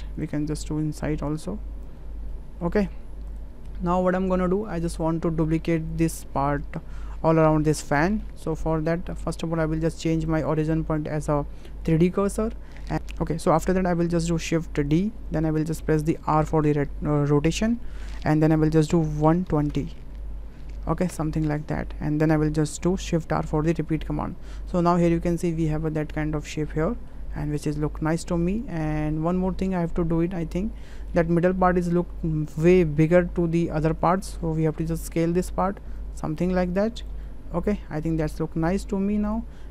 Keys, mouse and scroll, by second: 0.3-1.8 drag, 2.5 middle click, 3.9 shift+middle drag, 8.2 shift+middle click, 10.3-12.3 drag, 15.0 shift+d, 23.6 shift+r, 24.7-25.2 middle drag, 25.7-27.1 middle drag, 28.5 middle click, 29.7-30.8 middle drag, 31.1 drag, 31.6 middle click, 34.7 s, 37.4-38.4 middle drag.